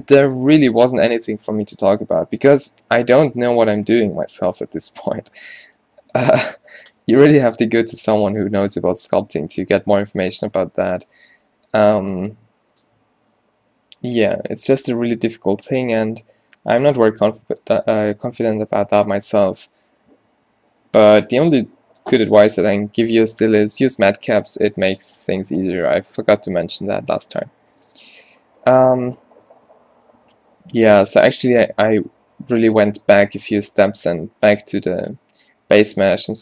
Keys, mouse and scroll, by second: 13.5 middle click, 21.0 n, 27.8 n, 34.1-36.4 middle drag.